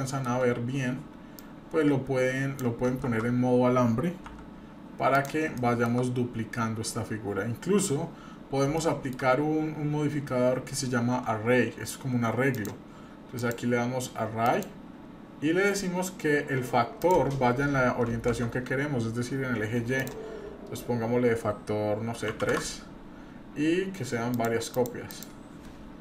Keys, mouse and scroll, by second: 0.0 shift+middle drag, 1.4-2.6 drag, 3.0 shift+z, 4.3 s, 5.6-6.0 shift+middle drag, 6.2-6.6 scroll down 1, 8.7-9.2 shift+middle drag, 9.4 scroll down 1, 10.7 scroll up 1, 12.5-16.5 drag, 17.0-18.4 drag, 20.0-22.7 drag, 24.3 click, 24.7 click, 25.1 click, 25.7 scroll down 1.